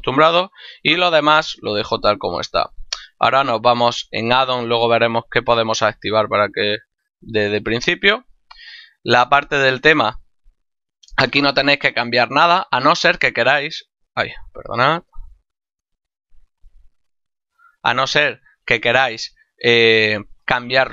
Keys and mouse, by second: 4.1 click, 6.0 click, 10.3 middle click, 12.3 middle click, 15.2 click, 17.0 click, 19.2 click.